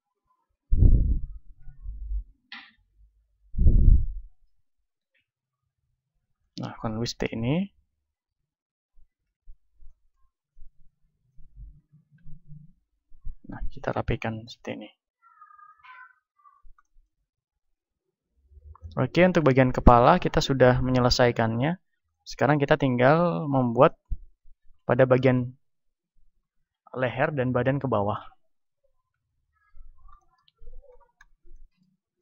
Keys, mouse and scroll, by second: 1.6 d, 1.9 f, 2.6-5.8 right drag, 4.8 f, 5.4 click, 5.7 a, 5.8-6.9 middle drag, 6.9 click, 6.9 right click, 7.2 middle click, 8.1-9.8 right drag, 9.2 KP_1, 9.8 middle click, 10.5-11.7 drag, 11.7 middle click, 12.2 click, 13.1-15.6 middle drag, 14.5 KP_1, 15.6-18.0 drag, 17.3-29.5 middle drag, 17.4 a, 18.0 z, 18.4 z, 29.1 KP_1, 30.3-32.2 middle drag.